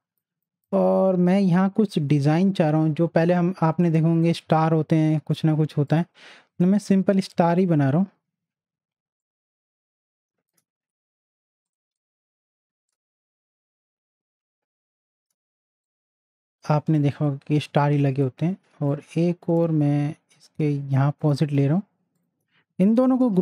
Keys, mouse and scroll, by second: 0.3 space, 0.5 click, 0.8 space, 3.7 right click, 5.9 click, 9.2-11.7 alt+shift+drag, 13.2-15.8 shift+drag, 16.1 click, 16.8 space, 17.7 space, 17.7 click, 18.1 space, 18.9-22.1 drag, 23.2 ctrl+g.